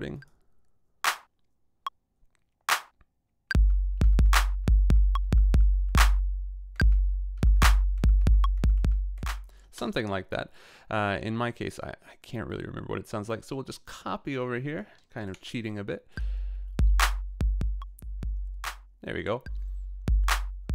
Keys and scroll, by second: 3.5 a, 9.7 space, 15.3 BackSpace.